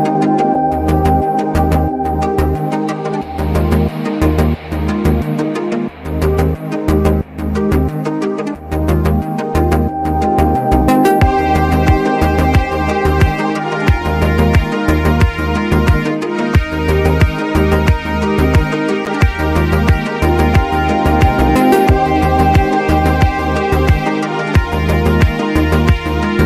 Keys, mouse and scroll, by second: 0.5 typing, 0.7 alt+scroll down 1, 1.3 click, 4.7 click, 5.0 space, 5.7-6.1 scroll up 2, 6.4 alt+scroll down 1, 6.9 click, 8.9 alt+scroll down 1, 9.5-12.6 drag, 12.6 click, 15.9-17.5 drag, 17.5 scroll up 1, 18.4-20.9 alt+shift+drag, 20.9 right click, 21.4-24.1 drag, 24.1 right click, 24.9 click.